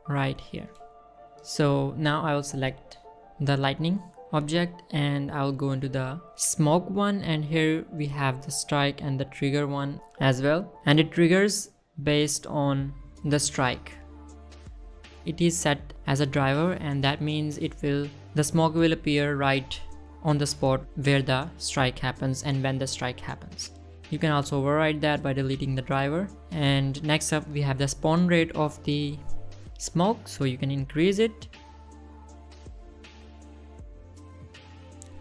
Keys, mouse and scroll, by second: 0.0 scroll down 1, 1.0 shift+middle click, 1.7 click, 3.1 click, 5.2 middle click, 6.0 middle click, 6.6 middle click, 7.0 middle click, 7.5 middle click, 8.9 click, 11.2-11.8 right drag, 13.1-14.2 middle drag, 15.2 middle click, 16.7 middle click, 20.3 middle click, 21.2 middle click, 22.6 middle click, 24.3 middle click, 26.5-27.3 right drag, 28.4 middle click, 31.3 click, 32.1 click, 32.6 space, 33.5 space.